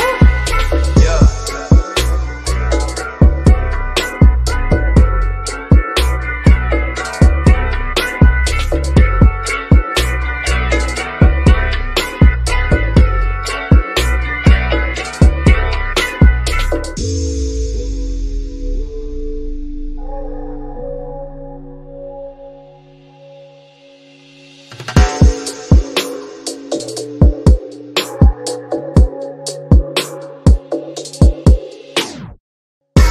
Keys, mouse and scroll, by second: 1.0 scroll down 1, 1.6 scroll down 1, 1.7-3.8 middle drag, 3.8 ctrl+a, 6.0 click, 6.0 click, 9.1 click, 9.7-10.5 scroll down 1, 10.7 shift+middle click, 11.6-14.0 shift+middle drag, 13.9 click, 14.0 click, 16.2 click, 17.8 scroll down 1, 19.7 scroll up 1, 19.8 click, 21.9-26.4 drag, 26.4-27.6 scroll down 1, 27.6 click, 28.6 typing, 29.6 click, 32.0 click.